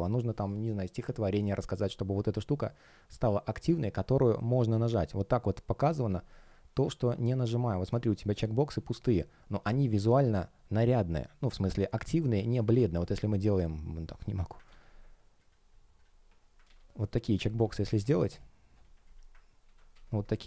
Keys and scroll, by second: 6.0 space, 14.6 super+c, 16.5 super+v, 19.5 super+z.